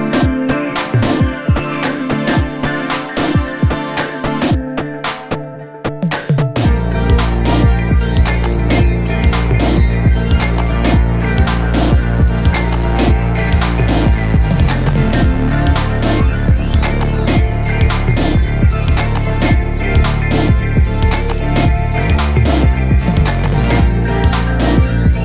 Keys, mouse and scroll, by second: 0.0-23.0 typing, 1.2 shift+middle click, 1.9 shift+middle click, 2.0 scroll down 1, 2.1 scroll up 1, 2.8 scroll up 1, 2.9 shift+middle click, 5.2 scroll down 2, 6.0 shift+middle click, 6.1 scroll down 1, 6.5 shift+middle click, 6.5 scroll up 1, 7.4 ctrl+z, 9.3 scroll down 4, 9.4 shift+middle click, 11.1 shift+middle click, 11.9 scroll down 1, 13.0 scroll down 2, 13.8 scroll up 3, 14.0 scroll down 1, 14.0 shift+middle click, 14.5 scroll up 1, 15.7 shift+middle click, 16.6 scroll down 1, 16.7 scroll up 1, 16.8 shift+middle click, 17.1-17.7 scroll down 2, 18.1 scroll up 2, 19.3 scroll down 1, 19.4 shift+middle click, 20.4 shift+middle click, 20.5 scroll up 3, 21.7-22.0 scroll down 3, 21.8 shift+middle click, 22.3 shift+middle click, 22.7 scroll down 1, 22.8 shift+middle click, 23.3 drag.